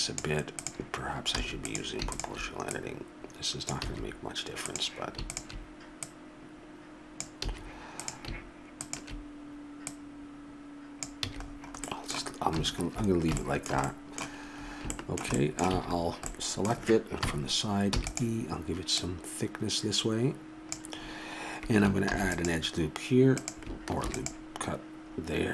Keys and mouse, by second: 1.4 a, 3.9 a, 7.4 a, 8.0-9.9 middle drag, 11.3 a, 11.5 middle click, 15.8 a, 17.2 KP_3, 17.9 e, 19.0-21.0 drag, 22.1 ctrl+r, 24.0 ctrl+r.